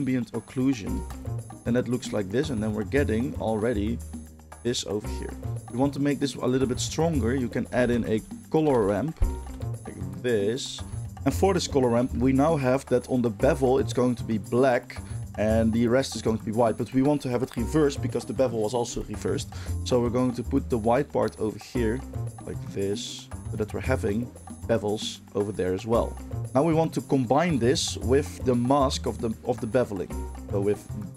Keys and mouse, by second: 1.0 ctrl+shift+click, 1.1-5.1 ctrl+shift+middle drag, 5.1-10.2 drag, 6.6 shift+a, 8.7 BackSpace, 10.2-11.1 middle drag, 11.1-31.1 drag.